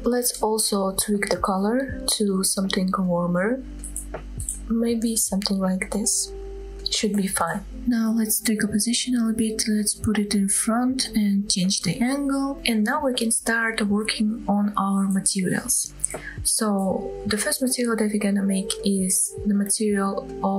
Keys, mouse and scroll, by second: 1.5 click, 5.9 click, 6.7-7.0 scroll up 2, 7.3 shift+middle drag, 7.7 scroll down 2, 7.8 scroll up 1, 7.9 click, 8.2 middle click, 8.6 KP_3, 8.8 scroll up 1, 9.1 g, 9.4 x, 9.8 y, 10.5 click, 11.6-12.0 scroll down 3, 11.9-12.3 scroll up 3, 12.1 middle drag, 12.3 scroll down 2, 12.5 click, 12.6-13.4 middle drag, 14.1-14.4 middle drag, 17.1 scroll down 2, 17.5-17.8 middle drag, 18.0 scroll up 2, 18.3-18.7 shift+middle drag, 18.9 middle click.